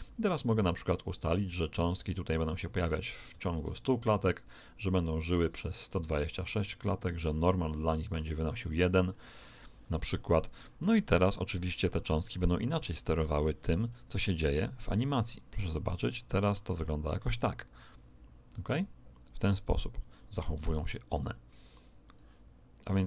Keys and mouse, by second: 0.8 click, 4.4 click, 6.2-8.3 middle drag, 7.9 click, 15.0 click, 20.7 right click, 21.1 r, 22.6 middle click.